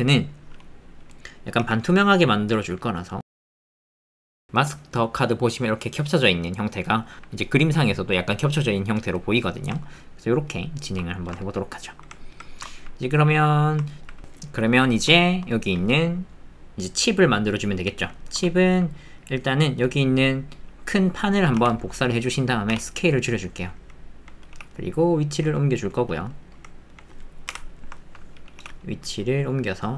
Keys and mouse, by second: 1.6 g, 3.2-7.1 drag, 10.1 ctrl+click, 12.1 alt+click, 15.1 shift+click, 15.5 click, 17.6 click, 18.2 shift+middle click, 18.5 ctrl+middle click, 19.2 middle click, 22.3 click, 22.7 s, 23.6 click, 24.5 g, 26.1 middle click, 27.5 KP_Decimal, 28.0 ctrl+middle click, 28.6 g.